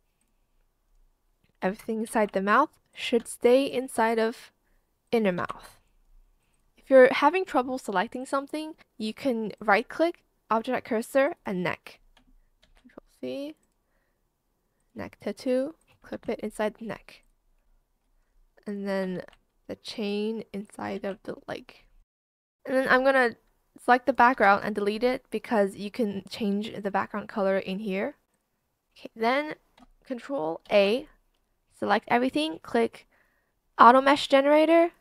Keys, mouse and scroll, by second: 3.1 ctrl+c, 4.1 shift+click, 5.3 ctrl+v, 5.5 Return, 8.8 ctrl+z, 13.7 ctrl+c, 17.2 ctrl+v, 17.5 Return, 20.6 ctrl+c, 21.6 ctrl+v, 21.9 Return, 24.3 BackSpace, 27.2 BackSpace, 30.6 ctrl+a.